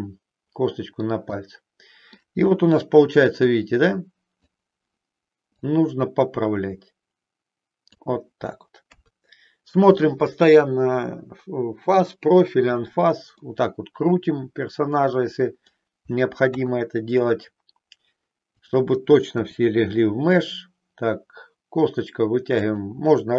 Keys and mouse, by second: 0.0-1.1 middle drag, 1.4-2.4 middle drag, 2.5 KP_1, 3.5-4.5 drag, 5.6-7.8 drag, 8.8 KP_3, 13.4-15.7 middle drag, 16.5 KP_3, 18.6 click, 19.5 e, 22.7 click.